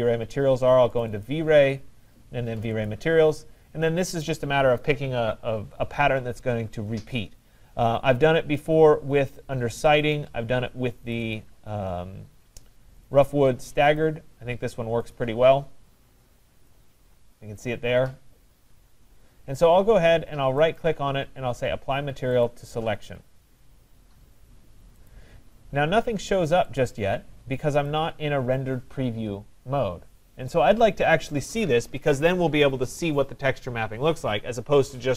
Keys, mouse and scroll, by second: 1.0 click, 1.3 click, 2.7 click, 2.9 click, 7.8 middle click, 7.9 middle click, 8.0 middle click, 9.8 click, 10.0 click, 11.1 click, 11.3 click, 13.1 click, 13.3 click, 14.0 click, 15.2 click, 16.7 click, 20.8 right click, 22.5 click, 25.3 click, 26.8 click, 27.9 click.